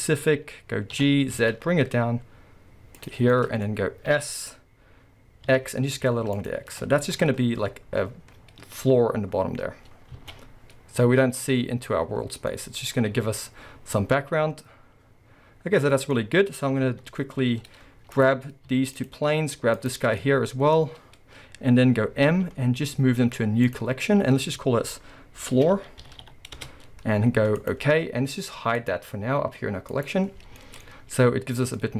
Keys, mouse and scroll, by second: 0.0-1.0 middle drag, 1.0 g, 3.1 click, 3.2 scroll, 3.4 middle click, 4.1 s, 6.5 click, 7.7-8.8 scroll, 8.8 scroll up 1, 8.9-10.2 scroll down 1, 10.2 alt+a, 10.3-11.4 middle drag, 11.4 scroll down 2, 11.9 middle click, 16.2 scroll down 1, 16.9 KP_7, 17.5-18.1 middle drag, 18.1 click, 19.0 shift+click, 19.8 shift+click, 20.0 scroll down 1, 20.2-26.1 middle drag, 20.7-21.2 scroll up 1, 22.2 m, 26.1 o, 28.8 click, 29.9 click, 30.4-31.4 scroll, 30.6-31.9 middle drag.